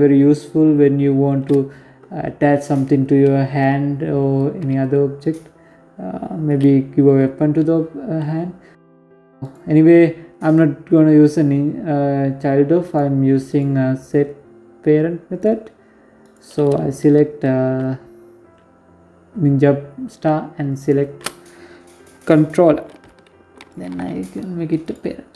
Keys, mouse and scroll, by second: 5.2 click, 8.1 right click, 11.5 right click, 12.2 right click, 14.1 right click, 14.9 right click, 19.5 shift+right click, 22.3 ctrl+p, 25.2 right click.